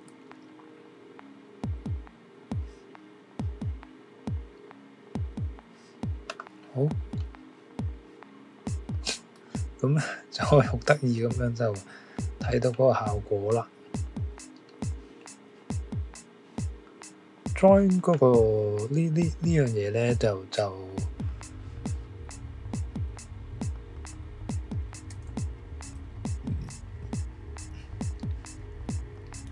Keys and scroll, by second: 11.4 Escape, 12.2 typing, 18.4 typing, 25.1 2.